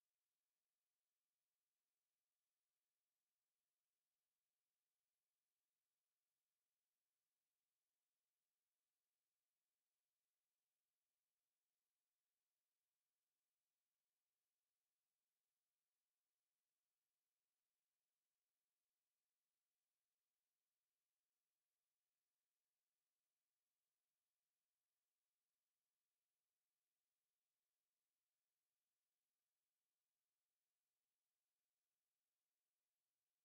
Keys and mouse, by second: 3.2 f, 5.2 f, 6.9-8.1 right drag, 8.3 f, 9.4 a, 13.5 middle click, 15.8-16.8 middle drag, 18.3 right click, 19.2 right click, 20.3 f, 21.2 middle click, 22.7 middle click, 24.5 a, 25.5 a, 30.6 z, 32.3 ctrl+a.